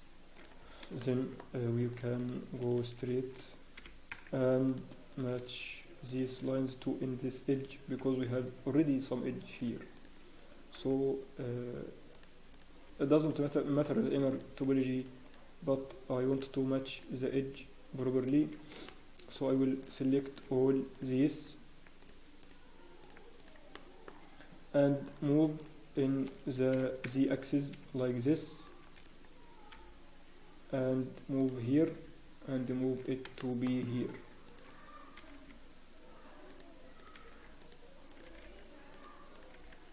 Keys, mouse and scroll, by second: 0.6 scroll down 1, 1.0 shift+middle click, 1.3 scroll down 3, 1.9 click, 2.1 shift+click, 2.1-2.5 scroll up 1, 2.7 click, 3.0 shift+click, 3.8 g, 5.1 click, 6.0 shift+click, 8.0 g, 10.7 click, 10.7 g, 12.5 click, 12.7 g, 14.3 click, 14.4 g, 15.2 click, 15.6 g, 16.9 click, 17.2 g, 18.8 shift+middle click, 19.8 click, 20.9 shift+click, 21.8 shift+click, 23.3 shift+click, 23.7 shift+click, 23.7 shift+middle click, 25.0 shift+click, 26.4 shift+click, 28.9 click, 28.9 g, 29.7 g, 31.7 click, 31.9 g, 33.3 shift+scroll, 33.4 shift+middle click, 33.6 shift+scroll up 2, 34.4 click, 35.1 scroll up 1, 35.1 g, 37.0 click, 37.1 g, 38.1 click, 38.2 g, 39.3 click, 39.5 g.